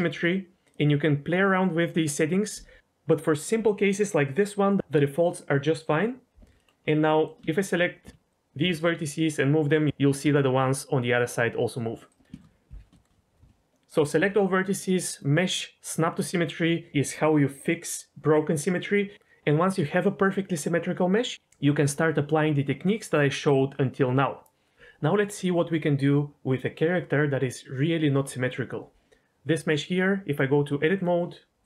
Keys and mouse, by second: 6.5 middle click, 7.1 middle click, 7.4 shift+middle click, 8.0 z, 8.6 g, 9.8 click, 10.2 g, 12.0 click, 12.4 shift+middle click, 13.0 shift+middle click, 14.1 a, 15.0-16.9 right drag, 29.2 Tab, 30.4 click.